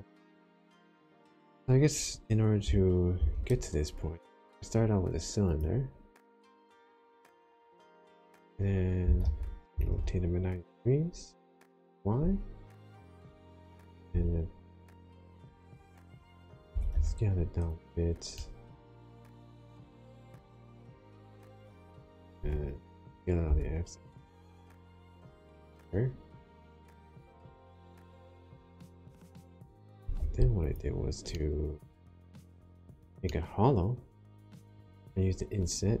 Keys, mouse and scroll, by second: 1.3 click, 1.7-2.6 scroll down 1, 3.1 shift+a, 8.9 r, 9.2 y, 9.7 9, 9.8 0, 11.4 Return, 14.1 s, 16.2 click, 16.7 g, 16.9 y, 17.7 click, 18.3 shift+middle click, 19.1-19.5 scroll down 2, 19.5 middle click, 20.3-20.8 scroll up 1, 22.3 s, 23.4 x, 25.1 click, 25.8 middle click, 27.7 click, 28.2 middle click, 28.6-29.1 scroll up 1, 29.6 middle click, 30.2 3, 30.6 click, 30.6-31.2 scroll up 1, 31.2 middle click, 32.5 shift+click, 33.2 middle click, 35.8 i.